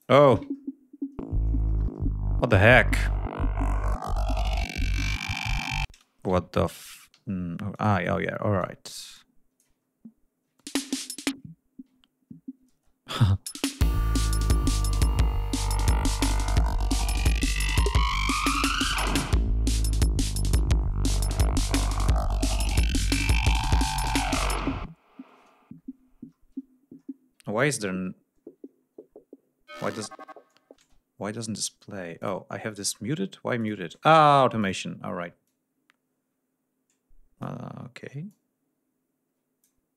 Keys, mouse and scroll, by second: 0.5-1.4 ctrl+scroll down 4, 2.4-2.7 scroll up 2, 2.8 scroll down 2, 4.1-5.1 scroll up 4, 5.3 scroll down 2, 5.8 space, 6.8 ctrl+d, 7.2 ctrl+scroll up 2, 7.7 ctrl+click, 8.5 click, 9.8 ctrl+scroll up 2, 10.5 space, 10.9 ctrl+scroll down 2, 11.8-12.4 ctrl+scroll down 4, 12.6 ctrl+space, 13.0 ctrl+click, 13.3 ctrl+space, 13.6 ctrl+scroll up 2, 14.5 ctrl+scroll up 2, 15.6 click, 17.8 ctrl+scroll down 2, 26.3-26.7 scroll down 2, 26.8-27.1 scroll down 2, 27.4-28.1 scroll down 2, 28.2 scroll up 2, 28.7 ctrl+scroll down 2, 29.0-29.6 ctrl+scroll up 4, 30.7 space, 32.1 click, 33.5 click, 34.5 click, 35.3-37.5 drag, 37.5 ctrl+scroll up 2, 38.2-39.7 ctrl+drag, 39.9 click.